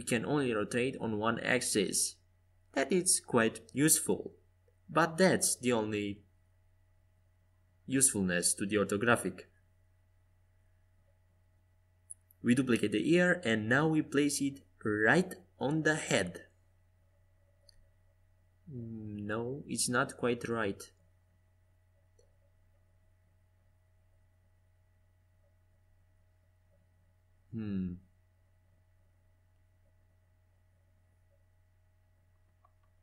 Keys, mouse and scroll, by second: 5.0-7.5 right drag, 5.7 Tab, 9.5 e, 12.6 g, 18.0 g, 22.1-24.3 middle drag, 26.4 g, 29.3-31.9 middle drag, 31.9-33.0 drag.